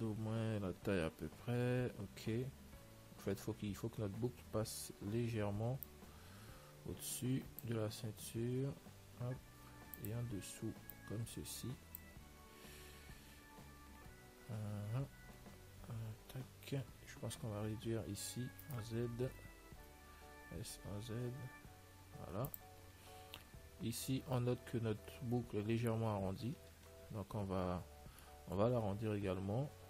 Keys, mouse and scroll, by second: 0.1-4.7 middle drag, 2.2 z, 5.1 l, 6.1 click, 8.7 s, 11.2 click, 13.9-15.7 middle drag, 15.7-16.6 scroll up 1, 15.7 z, 16.7 z, 18.9-20.9 right drag, 20.7 s, 23.2-27.0 middle drag, 24.2 z, 27.0 z, 27.8-29.8 middle drag.